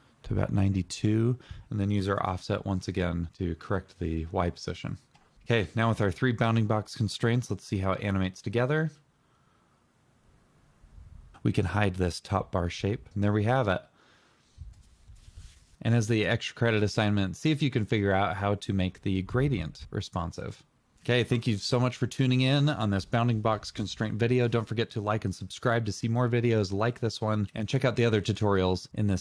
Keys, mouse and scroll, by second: 0.6 double click, 0.9-1.2 typing, 1.2 Return.